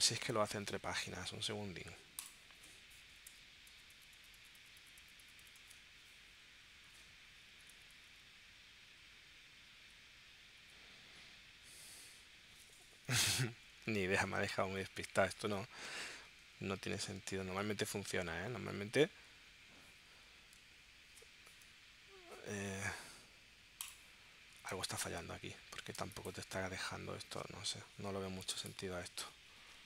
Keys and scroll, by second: 3.3 Return, 7.5 Return, 8.9 Return, 10.6 Return, 11.7 Return, 26.0 space.